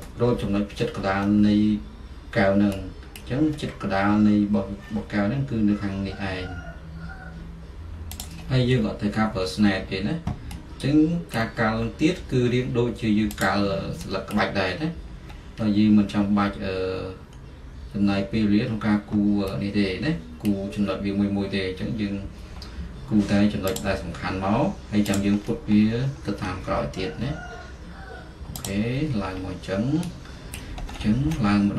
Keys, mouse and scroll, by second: 0.0-7.5 middle drag, 0.1-0.9 scroll, 1.3-2.4 scroll, 2.5-2.9 scroll, 3.3-3.6 scroll, 4.9-7.5 scroll, 8.3 click, 8.6-13.8 middle drag, 8.6-9.3 scroll, 9.7-11.4 scroll, 11.5-11.8 scroll, 13.8 click, 13.9-19.5 middle drag, 13.9-14.4 scroll, 14.4 scroll, 20.6-28.7 middle drag, 20.6-21.6 scroll, 25.5 click, 25.5-26.4 scroll, 26.5-28.5 scroll, 28.7 click, 29.0-31.7 middle drag, 29.5 scroll.